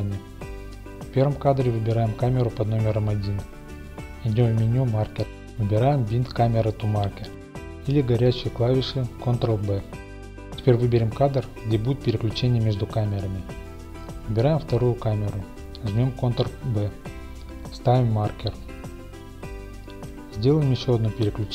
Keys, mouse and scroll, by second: 2.6-4.5 drag, 5.1-10.7 drag, 11.2 middle click, 11.6-14.3 middle drag, 14.3 click, 15.6-18.7 drag, 19.0-21.5 drag, 19.9 ctrl+b.